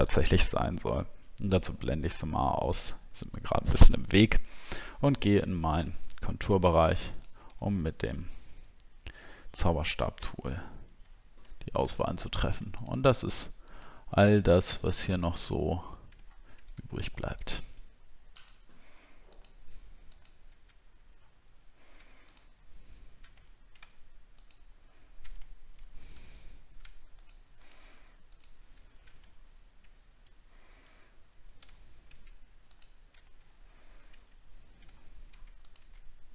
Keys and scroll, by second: 7.7 alt+scroll up 1, 11.2 alt+scroll up 1, 16.4 alt+scroll up 1, 23.5 alt+scroll up 1, 25.8 ctrl+z, 29.4 alt+scroll down 1, 31.8 alt+scroll up 1, 33.4 alt+scroll down 1, 34.8 alt+scroll up 1.